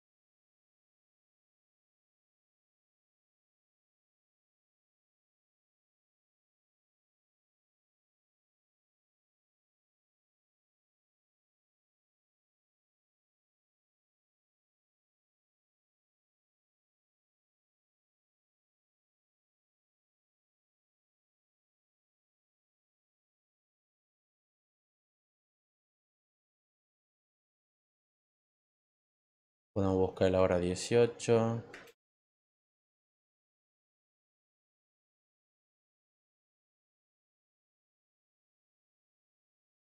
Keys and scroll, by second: 16.3 Return, 24.3-26.1 typing, 31.5-32.6 typing.